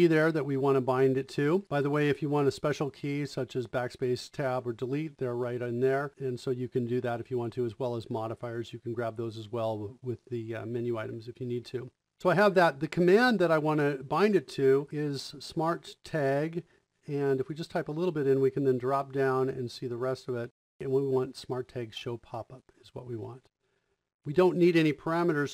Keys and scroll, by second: 14.6-15.4 typing.